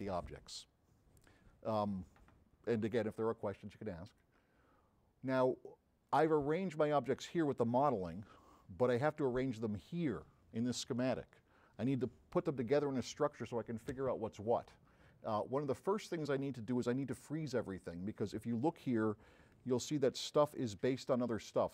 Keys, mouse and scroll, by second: 4.1 click, 5.7 drag, 6.8 middle click, 6.8 scroll up 2, 15.0 middle click, 15.0 scroll up 4, 15.2-15.5 middle drag, 15.8 middle click, 20.3 m.